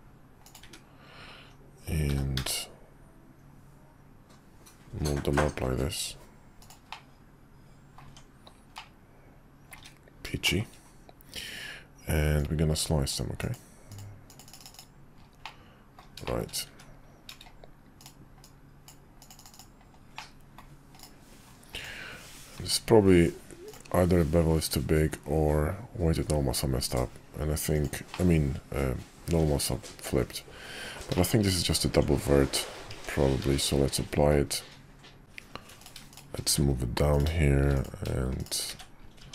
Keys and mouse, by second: 0.6 `, 2.1 g, 6.9-8.0 middle drag, 8.0 Tab, 8.7-9.7 middle drag, 9.7 `, 10.4 shift+middle click, 12.4-13.1 drag, 14.7-15.1 drag, 15.4-16.0 middle drag, 16.2 shift+middle click, 16.7 `, 18.0-18.9 middle drag, 20.1-20.6 middle drag, 21.8 click, 22.6 q, 28.1 middle click, 31.1 shift+middle click, 31.9 Tab, 32.5 Tab, 32.9 Tab, 33.4 q, 36.1 shift+click, 36.4 1, 37.1 click, 38.7 1, 39.2 Tab.